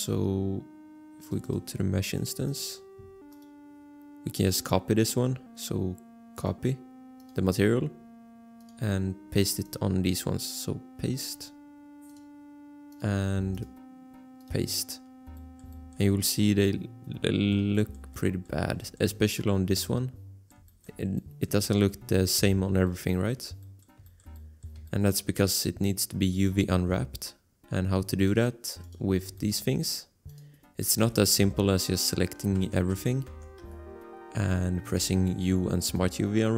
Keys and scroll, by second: 31.0 a, 32.5 Tab, 32.9 a, 33.3 Tab, 33.6 a, 35.0 u.